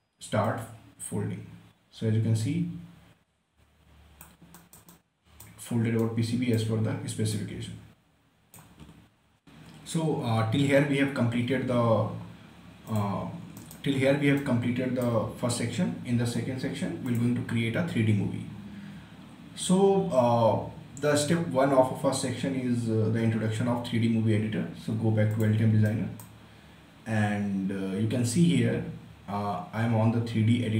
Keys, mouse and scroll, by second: 0.8-4.9 drag, 4.9-7.1 right drag, 7.1 scroll up 1, 7.7-9.4 shift+right drag, 12.9 click, 13.6-17.1 right drag, 17.1 click, 18.1 scroll down 1, 25.4 click, 25.9-28.7 right drag.